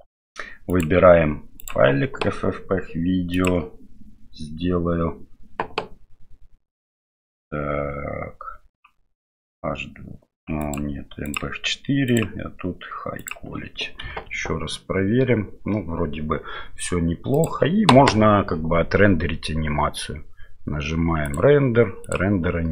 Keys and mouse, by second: 0.7-1.8 drag, 3.4 click, 10.7-11.4 drag, 12.2-13.3 drag, 14.6 F12, 21.4-22.7 drag.